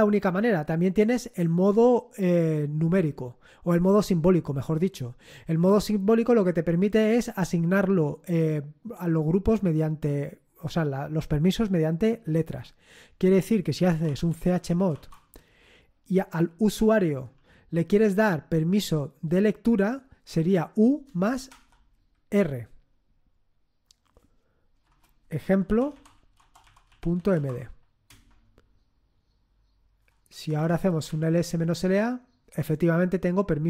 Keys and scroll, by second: 13.6-15.4 typing, 16.7 typing, 20.8-21.9 typing, 24.8-27.8 typing, 28.0 Return, 30.3-32.2 typing.